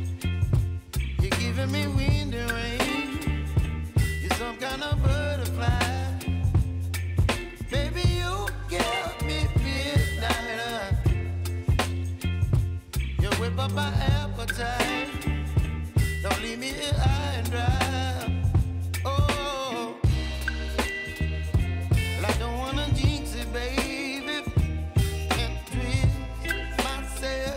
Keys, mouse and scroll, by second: 0.5-1.9 drag, 1.9 F9, 2.3-2.7 typing, 3.2 click, 5.5 space, 8.0 space, 9.3 click, 11.8 click, 13.6-14.7 typing, 14.8 Down, 15.4 Return, 16.2 ctrl+a, 16.7 ctrl+c, 17.3 alt+click, 17.8 ctrl+v, 18.2 alt+click, 18.7 ctrl+v, 19.0-23.0 drag, 24.5 =, 25.3-27.5 drag.